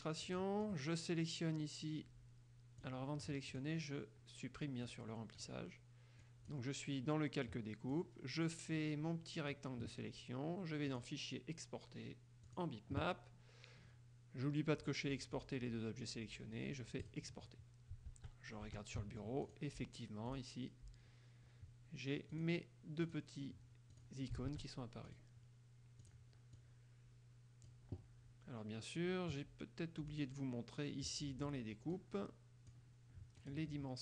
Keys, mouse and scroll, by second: 0.4 click, 2.7 click, 3.6 click, 5.0 click, 5.6 click, 6.4 click, 8.1-9.9 drag, 11.0 click, 12.6 click, 15.5 click, 17.2 click, 18.2 alt+Tab, 19.6 alt+click, 20.5 click, 22.5 click, 23.2 click, 24.1 click, 24.6 alt+Tab, 25.2 click, 26.2 click, 26.8-28.0 drag, 30.3 click, 32.1-33.0 drag, 33.6 click.